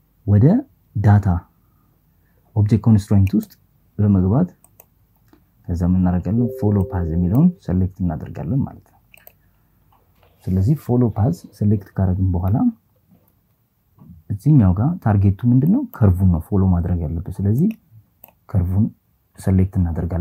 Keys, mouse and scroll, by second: 1.9 click, 3.3-6.7 drag, 14.7-17.7 drag.